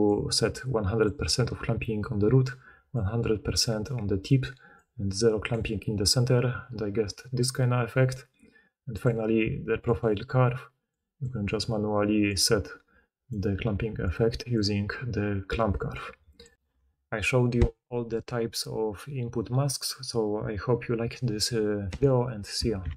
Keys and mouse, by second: 22.8 ctrl+middle click.